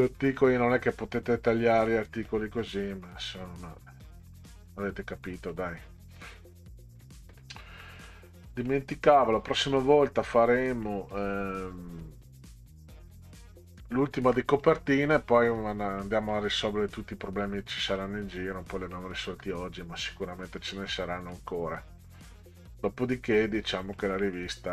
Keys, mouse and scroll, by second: 1.9 middle click, 4.7 middle click, 5.5-6.3 scroll down 2, 6.3 middle click, 7.8 middle click, 10.8 middle click, 14.3 middle click, 16.0 middle click, 18.0 middle click, 18.9 middle click, 20.1 middle click, 21.3-21.8 middle drag, 22.8 middle click, 24.0 middle click.